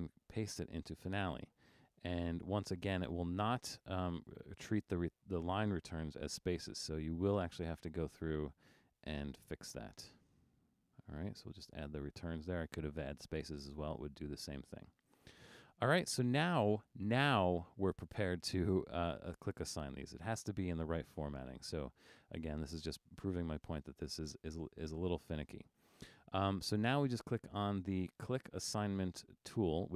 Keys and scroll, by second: 0.7 super+v, 6.9 Return, 10.1 Return.